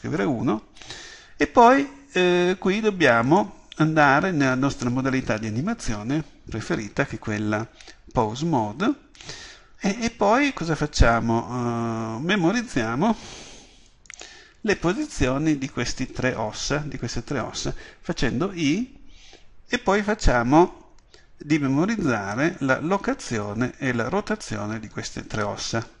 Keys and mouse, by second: 14.2-26.0 drag.